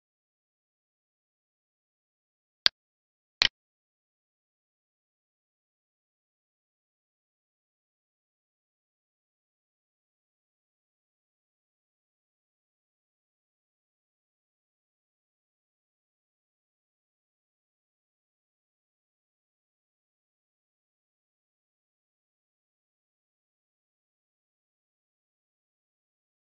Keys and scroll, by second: 5.7 alt+e.